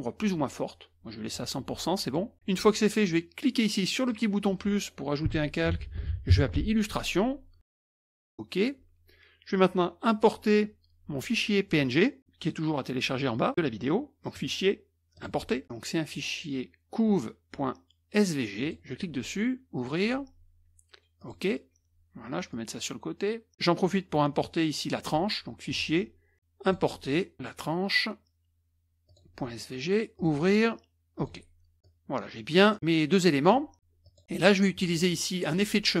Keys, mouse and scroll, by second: 2.0-2.3 drag, 4.1 click, 5.4-6.8 typing, 8.1 click, 14.2 click, 15.1 click, 18.6 click, 19.8 click, 21.2 click, 22.5-23.5 drag, 25.7-26.1 drag, 26.6 click, 29.1 click, 30.2 click, 31.2 click, 31.8 click, 33.5 middle click, 34.0 click, 35.4 click.